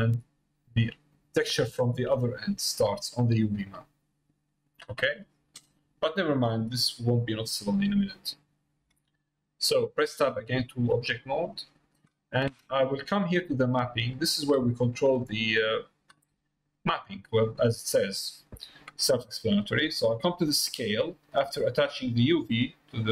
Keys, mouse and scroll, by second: 1.9 click, 2.8 click, 7.1 middle click, 8.2 middle click, 8.8 Tab, 9.6 middle click, 10.1 middle click, 10.7 shift+middle click, 11.1 middle click, 12.8 middle click, 13.4-14.5 drag, 15.1 middle click, 16.6 middle click, 22.2-23.1 drag.